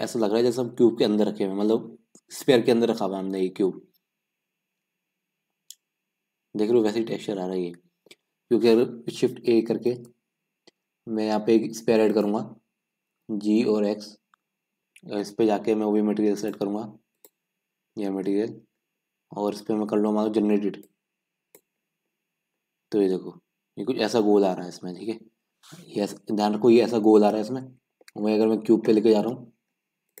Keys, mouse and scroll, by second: 8.3-9.2 scroll down 4, 12.4 shift+a, 13.2 g, 14.8-15.9 scroll down 3, 15.9-17.3 scroll down 1, 17.3-17.9 drag, 17.9-18.3 scroll up 3, 18.3-21.0 middle drag, 21.0-22.4 drag, 22.4 scroll up 2, 22.6-30.2 middle drag.